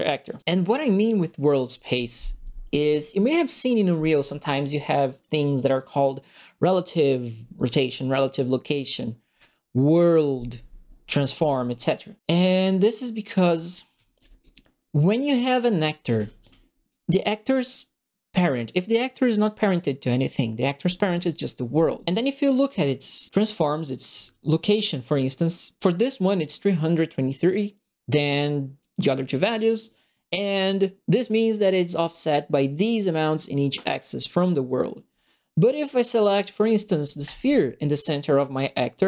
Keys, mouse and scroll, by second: 0.2 click, 12.5 click, 13.6-14.5 typing, 13.7 right click, 14.2 click, 15.4 click, 15.9 right click, 16.0 s, 16.4 a, 37.2 click.